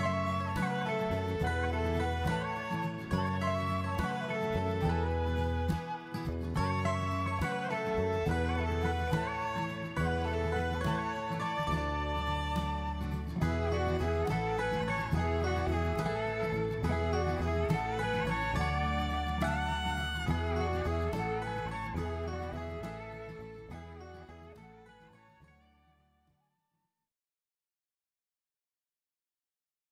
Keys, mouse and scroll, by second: 0.7-1.0 scroll up 2, 1.0 middle click, 2.4-2.8 scroll down 3, 2.8 middle click, 4.9 ctrl+3, 5.4 middle click, 9.2 Tab, 10.4 middle click, 11.7 click, 13.4 i, 14.9 middle click, 16.0 click, 17.4 i, 18.5 middle click, 21.6 click, 22.0 middle click, 24.4 click, 26.1 i, 28.5 middle click.